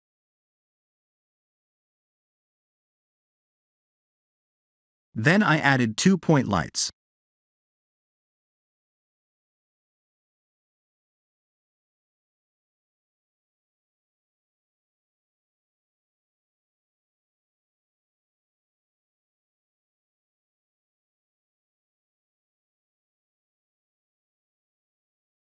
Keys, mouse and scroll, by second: 0.9 scroll up 1, 1.4-2.3 scroll down 7, 2.8 middle click, 3.7-4.1 scroll down 4, 4.5 shift+middle click, 6.0 shift+a, 8.3 middle click, 9.5 g, 11.1 shift+z, 11.5 g, 13.0 middle click, 14.8 shift+d, 16.9 click, 17.5 middle click, 18.4-18.9 scroll up 4, 19.2 shift+middle click, 20.5 middle click, 23.2 click, 24.2 click, 24.8 1, 24.9 1.